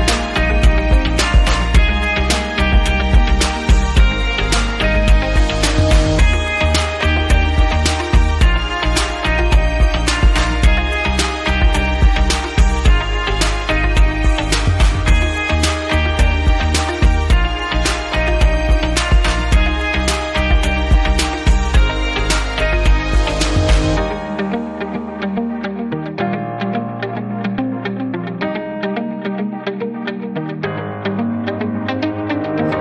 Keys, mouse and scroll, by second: 0.1 click, 3.8 click, 5.8 click, 6.6 click, 7.8 click, 8.9 click, 9.1 click, 11.8 click, 13.0 click, 14.8 click, 15.1 click, 16.3 click, 17.1 click, 19.5 click, 21.0 click, 22.6 click, 23.5 click, 24.6 click, 25.7 click, 26.6 click, 28.2 click, 29.1 right click, 30.0 click, 30.4 click, 30.6 right click, 30.8 double right click, 31.4 click, 32.4 click.